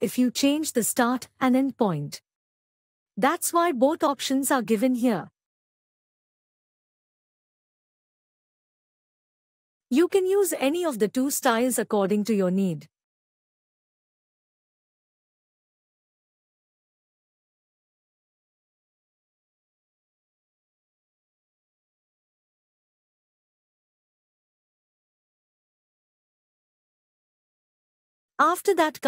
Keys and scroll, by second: 11.1 ctrl+e.